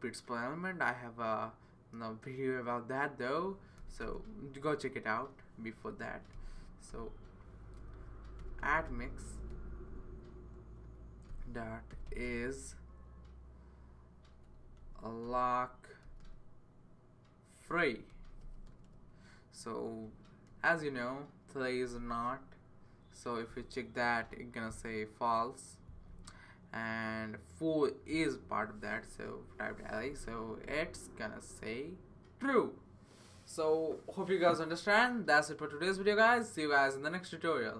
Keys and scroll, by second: 3.8 |, 4.0 Return, 5.8 typing, 6.9-10.0 typing, 11.0-12.4 typing, 14.8-16.5 typing, 17.8-22.4 typing, 22.6 Right, 22.8 Right, 29.1-29.7 typing, 31.1 typing.